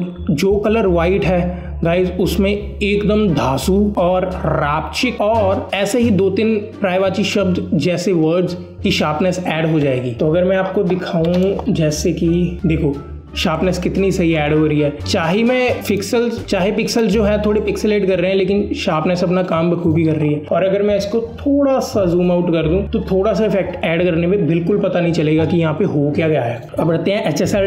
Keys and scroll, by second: 10.7 alt+space, 11.6 alt+space.